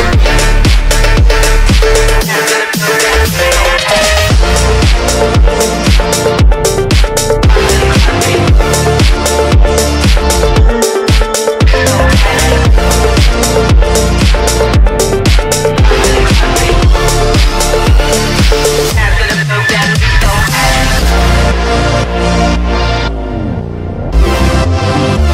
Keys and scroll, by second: 0.7 Delete, 1.9 F3, 2.0 Escape, 10.7 Delete, 11.5 F3, 11.6 Escape.